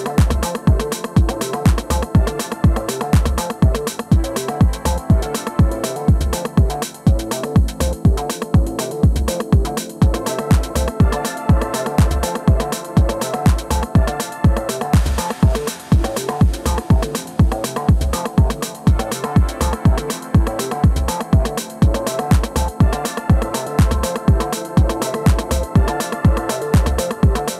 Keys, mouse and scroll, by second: 0.0 s, 2.2-3.8 right drag, 2.8-4.5 middle drag, 3.6 alt+w, 6.0 alt+w, 9.6-12.7 middle drag, 12.5 alt+m, 13.5 f, 14.2-19.3 drag, 14.4 g, 18.8 alt+w, 19.4 middle click, 22.2 middle click, 22.7-24.5 drag, 23.3 ctrl+z, 25.0 shift+f, 25.5-27.5 drag, 26.9-27.5 middle drag.